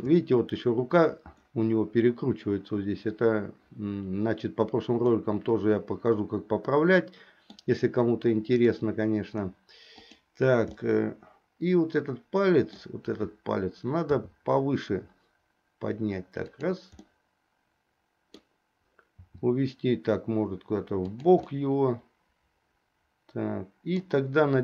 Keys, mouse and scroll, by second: 5.2-7.7 middle drag, 8.6 click, 10.0 click, 10.9-13.0 middle drag, 14.2 r, 17.3-18.5 middle drag, 19.3 r, 21.6-24.2 middle drag.